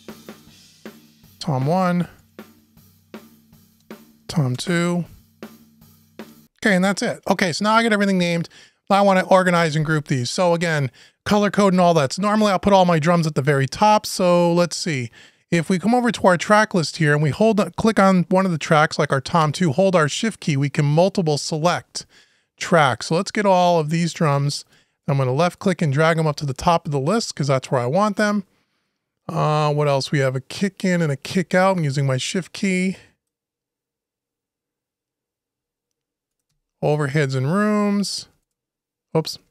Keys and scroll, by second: 4.3 Return.